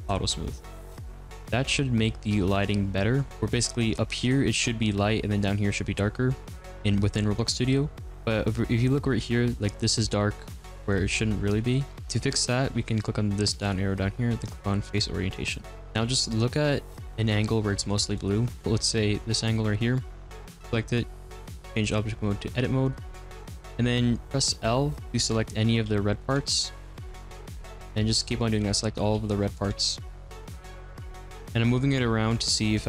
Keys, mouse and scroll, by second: 0.0 click, 1.1 click, 1.2-3.6 middle drag, 3.6-8.3 scroll up 1, 8.3-10.9 scroll up 2, 10.9-14.8 middle drag, 14.8-15.5 drag, 15.5-17.9 middle drag, 18.1-20.1 middle drag, 20.1 click, 22.9-25.0 drag, 25.0 l, 25.8 g, 26.4 ctrl+z, 27.4 l, 28.5 l, 29.1 g, 29.7 ctrl+z, 30.3-31.7 typing, 30.4 ctrl+z, 30.6 ctrl+z, 30.7 ctrl+z, 30.9 ctrl+z, 31.2 ctrl+z, 31.4 ctrl+z.